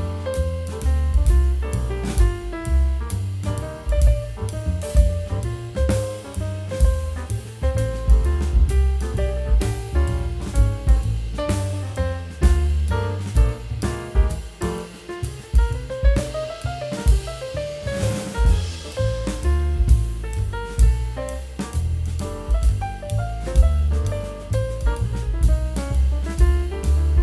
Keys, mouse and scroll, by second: 1.4 double click, 5.6 middle click, 6.5 double click, 6.7 Return, 9.6 double click, 10.8 middle click, 14.0 middle click, 17.6 double click, 21.2 w, 21.7 right click, 23.1 w, 26.8 right click.